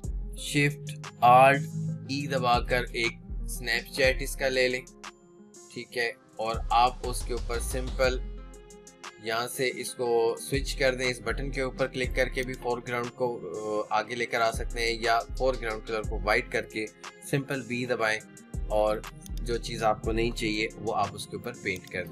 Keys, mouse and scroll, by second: 1.8 click, 2.9 ctrl+alt+shift+e, 18.1 b, 19.2 click, 19.6 b, 21.1 [, 21.3 [, 21.4 [, 21.7-22.1 drag.